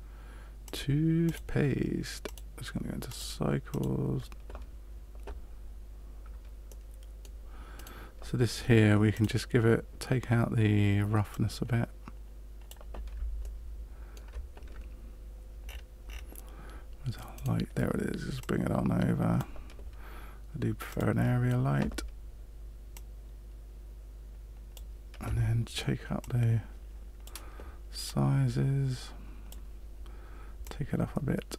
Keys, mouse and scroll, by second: 0.6 click, 1.2 click, 3.1 click, 6.6 middle click, 7.7 right click, 9.1 click, 11.2 click, 13.4 shift+middle click, 15.7-16.4 scroll down 9, 17.3 right click, 18.3 click, 20.8 click, 22.9 click, 26.1 click, 28.0 click, 30.6 click.